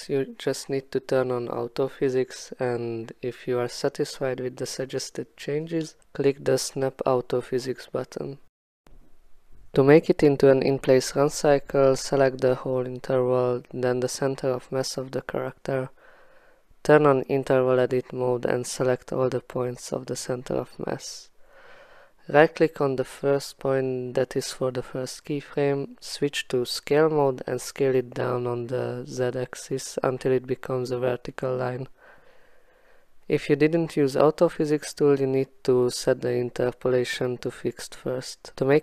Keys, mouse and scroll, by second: 0.4 alt+scroll, 3.9 x, 4.5 alt+middle click, 6.8 click, 8.6 click, 11.2 click, 13.5 8, 15.8 click, 20.5 click, 21.7 click, 24.5 click, 26.6 click, 30.5 click, 31.0 alt+scroll, 31.5-32.6 alt+scroll, 34.7 click, 34.8 alt+scroll, 35.0 alt+middle click, 35.5 alt+middle click, 36.2 click, 38.2 click, 38.6-38.8 alt+scroll.